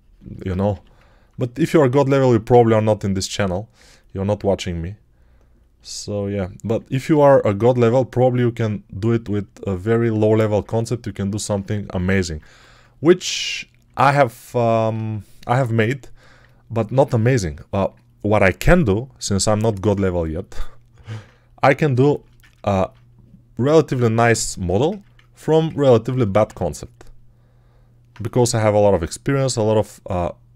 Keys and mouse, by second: 0.6 g, 7.1 1, 12.4 1, 14.4 alt+right click, 15.6 right click, 16.2 right click, 16.3 right click, 25.3 alt+shift+right click, 28.2 g.